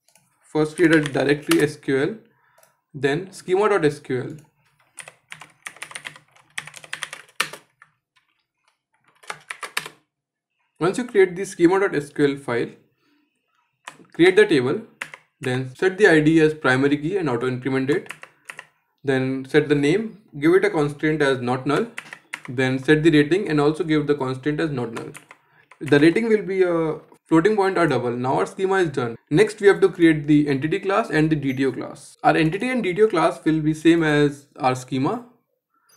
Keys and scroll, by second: 13.8 ctrl+z, 17.7 ctrl+z.